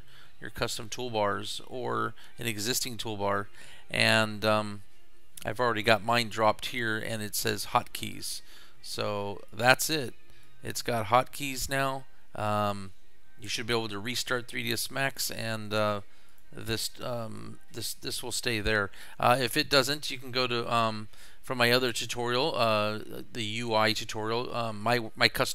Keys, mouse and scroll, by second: 8.3 click, 9.5 click, 10.5 drag, 16.3 click, 19.5 click.